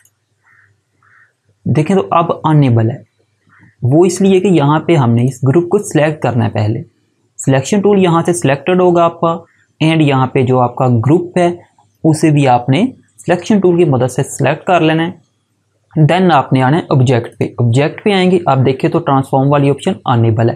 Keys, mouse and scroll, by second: 4.1 click, 17.2 click.